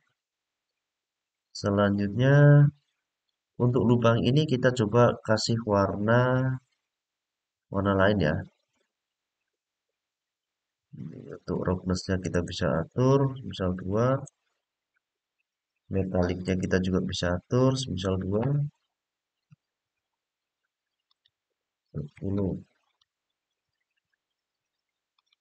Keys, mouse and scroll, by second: 1.6-3.6 middle drag, 6.0-8.7 middle drag, 10.2-11.1 scroll down 1, 12.1-13.9 drag, 16.2-18.2 drag, 20.8-22.7 drag, 24.9-25.4 drag.